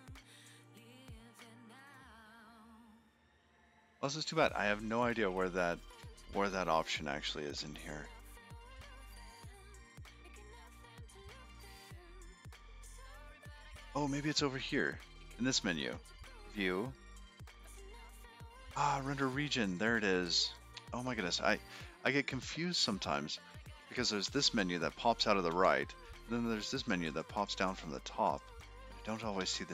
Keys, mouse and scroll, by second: 0.7 click, 1.7 click, 5.7 click, 8.1 click, 10.5 click, 13.3 click, 13.7 click, 14.9 click, 15.6 click, 17.5 scroll down 7, 19.1-20.0 scroll up 4, 20.0 click, 20.0 scroll up 1, 20.6 click, 25.2 n, 25.8 n, 26.3 n, 27.4 click, 28.2 click, 28.7 click.